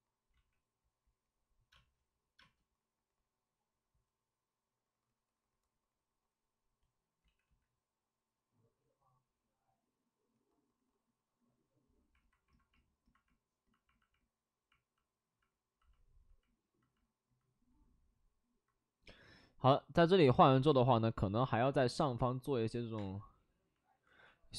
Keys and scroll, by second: 0.3 ctrl+z, 1.7 space, 2.3 space, 7.2 ctrl+z, 7.4 ctrl+z, 7.6 ctrl+z, 21.4 alt+s, 22.9 space, 24.0 ctrl+z.